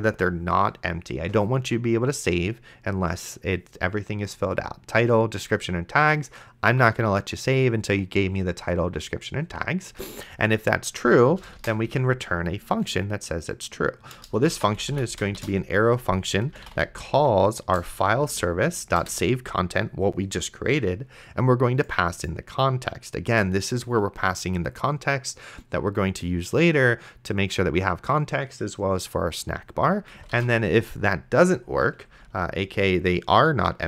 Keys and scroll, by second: 11.8 shift+/, 12.1 space, 14.6-18.8 typing, 17.8 Return, 19.0 Return, 30.6 shift+;, 32.1 space.